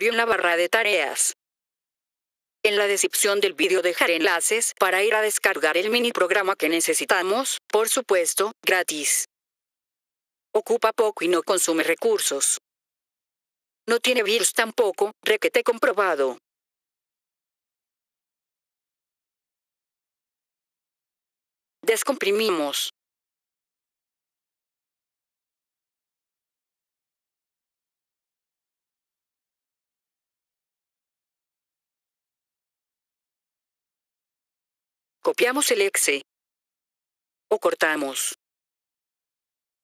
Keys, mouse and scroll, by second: 0.6 scroll up 2, 4.8 scroll down 1, 11.1 click, 14.2 click, 17.3 click, 19.2 click, 21.2 F3, 21.7 click, 23.3 F3, 23.9 right click, 27.6 click, 29.4 click, 31.3 F3, 31.9 click, 32.7 click, 32.9 click, 34.6 F3, 35.1 click, 35.8 right click, 36.9 right click, 39.7 click.